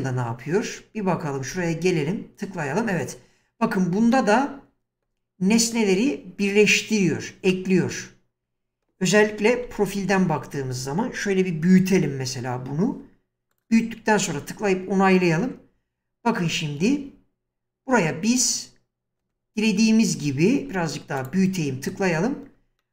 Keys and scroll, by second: 1.5 space, 9.6 1, 15.4 space, 20.6 s, 21.9 space.